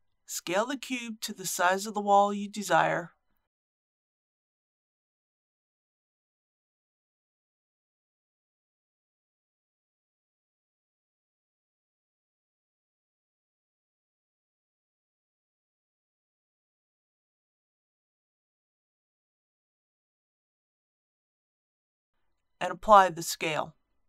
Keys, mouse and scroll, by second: 3.4 shift+middle click, 8.8 s, 9.2 x, 10.1 KP_5, 12.7 s, 13.1 z, 13.4 KP_3, 17.2-18.6 typing, 21.4 KP_1, 23.9 ctrl+a.